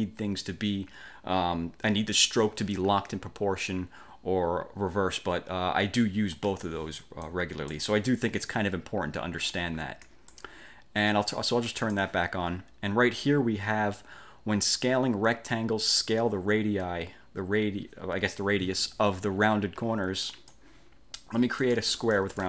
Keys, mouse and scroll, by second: 6.6 ctrl+z, 7.3 click, 10.1 click, 11.9 click, 20.4 click, 21.7 click.